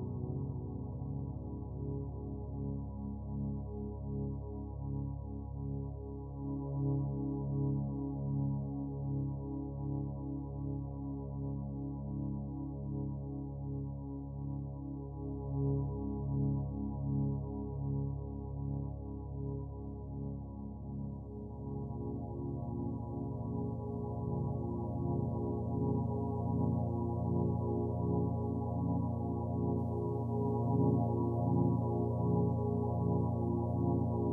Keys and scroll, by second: 31.4 ctrl+t.